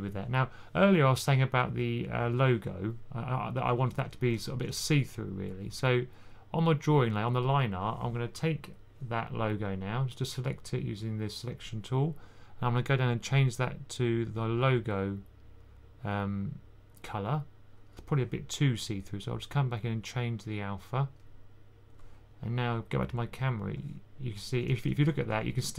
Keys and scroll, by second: 3.4-4.9 typing, 24.4 typing.